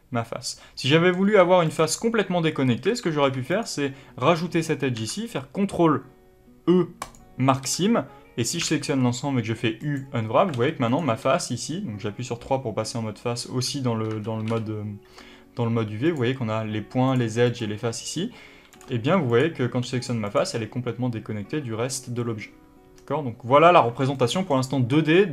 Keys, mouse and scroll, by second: 0.7 scroll down 2, 1.3 3, 1.6 click, 2.5 scroll up 1, 2.8 alt+a, 3.1 2, 3.4 click, 4.9 ctrl+e, 7.5 a, 10.4 alt+a, 10.8 click, 11.2 3, 13.7 2, 14.0 1, 14.3 2, 14.5 3, 15.9 click, 17.0 click, 17.4 click, 18.6 click, 18.9 g, 19.2 click, 19.8 g, 20.3 click, 22.8-24.0 scroll down 1, 24.0-25.3 middle drag.